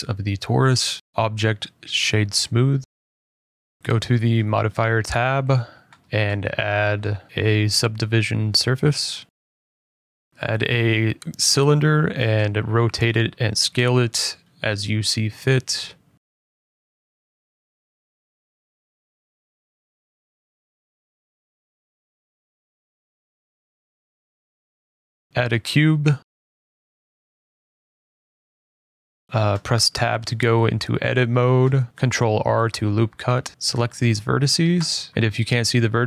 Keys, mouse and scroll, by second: 0.7 scroll, 1.6 click, 2.8 click, 3.5-4.1 scroll, 4.8 click, 5.1 click, 5.5 click, 7.7-8.1 scroll, 8.1 click, 8.7 click, 9.3-10.1 scroll, 10.1-10.4 scroll, 10.4 a, 12.9 click, 13.2 middle click, 13.2 middle click, 13.6 middle click, 13.8 middle click, 14.1 r, 15.2 scroll, 15.2-15.5 typing, 15.7 click, 16.3-16.8 scroll, 16.8 s, 18.4 click, 18.6 s, 20.3 click, 20.4 g, 21.5 click, 21.8 middle click, 21.8 middle click, 22.3 `, 22.8 click, 23.3 middle click, 23.6 click, 24.1 click, 25.0 middle click, 25.3 middle click, 25.7 a, 27.6 click, 28.0 middle click, 28.2 g, 29.1 click, 29.2 middle click, 29.8 Tab, 31.2 middle click, 31.7 ctrl+r, 32.1 scroll, 33.0 click, 33.2 click, 33.7 scroll, 33.7 ctrl+z, 33.7 ctrl+r, 33.7 click, 33.9 Escape, 34.6 middle click, 34.7 click, 35.1 click, 35.8 middle click.